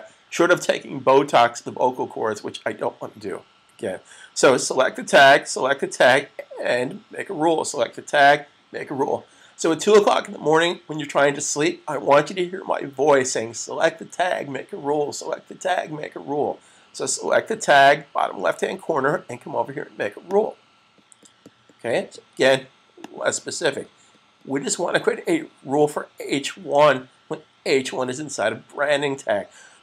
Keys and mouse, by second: 4.9 click, 20.0 click, 23.0 click.